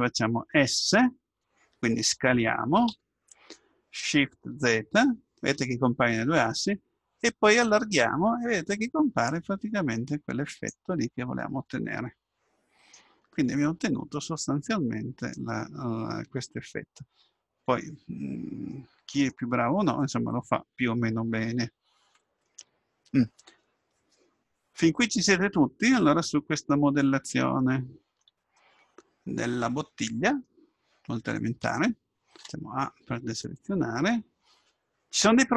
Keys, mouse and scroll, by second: 2.9 s, 11.1-11.8 scroll down 1, 11.8-16.2 middle drag, 25.0-27.0 middle drag, 27.5-30.5 middle drag, 32.4 a.